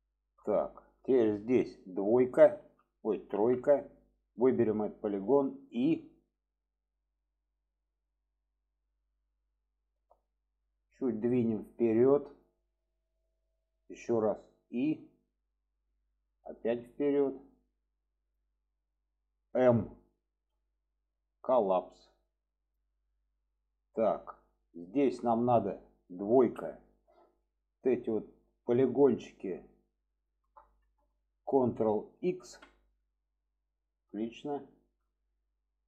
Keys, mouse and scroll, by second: 0.0 shift+middle click, 3.8 click, 9.5-10.6 middle drag, 11.1 click, 12.8-13.4 middle drag, 16.2-17.1 middle drag, 17.7 click, 19.0-19.4 middle drag, 20.5 m, 23.1-24.3 middle drag, 24.9 shift+middle click, 27.9 click, 30.2 shift+click, 32.6 ctrl+x, 33.2-34.8 middle drag, 35.2 shift+middle click.